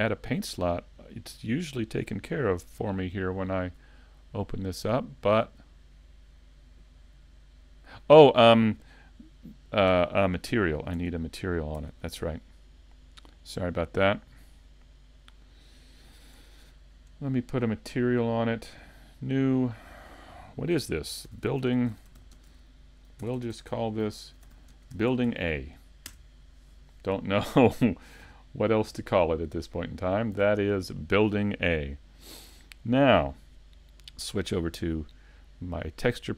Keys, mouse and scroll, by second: 4.1 click, 9.9 Tab, 13.3 click, 16.6 shift+middle click, 17.8 click, 23.4 BackSpace, 28.1 middle click, 33.9 click.